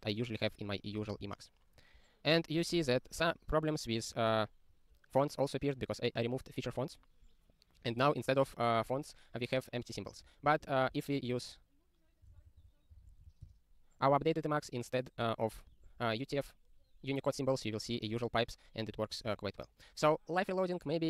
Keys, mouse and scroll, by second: 0.3 Return, 1.1 super+b, 2.0 click.